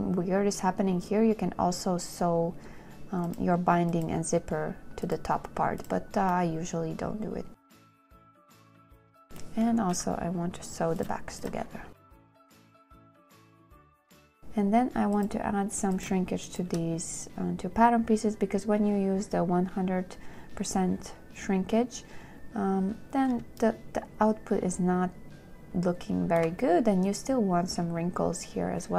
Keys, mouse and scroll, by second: 7.7 space, 9.0 space, 10.2 n, 12.0 space, 13.7 space, 14.3 z, 14.4 shift+click.